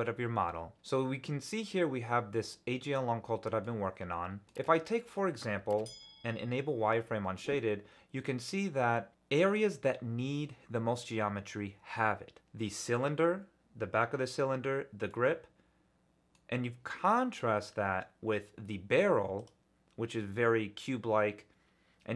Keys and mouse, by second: 0.7-3.6 drag, 4.4 click, 5.8 ctrl+alt+z, 7.5-8.5 middle drag, 8.9 middle click, 15.1-16.3 middle drag, 19.4 click.